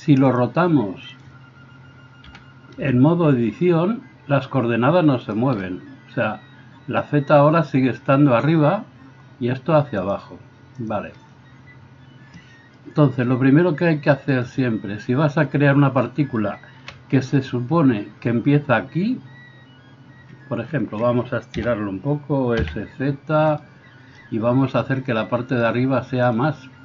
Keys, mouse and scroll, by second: 0.4-5.6 drag, 2.3 r, 5.6-10.1 middle drag, 10.1-23.6 drag, 16.8 KP_1, 21.5 s, 23.6-25.6 middle drag, 25.6-26.8 drag.